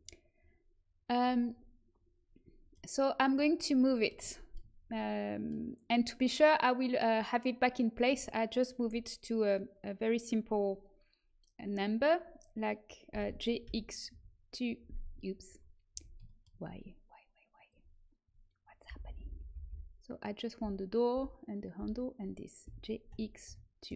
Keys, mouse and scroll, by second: 2.2-3.8 middle drag, 13.0 g, 15.8 a, 18.8-22.6 typing.